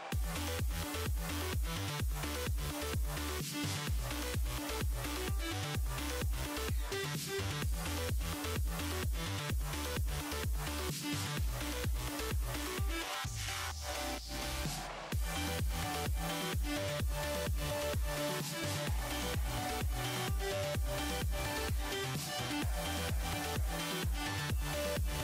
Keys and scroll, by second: 22.1 Escape.